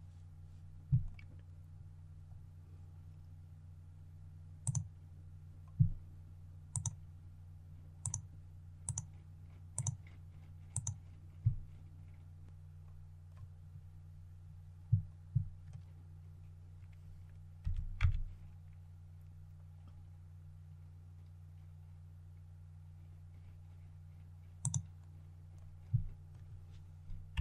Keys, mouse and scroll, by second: 1.5-2.0 scroll up 1, 4.5 click, 17.5-17.8 typing, 24.5 click, 27.2 KP_3.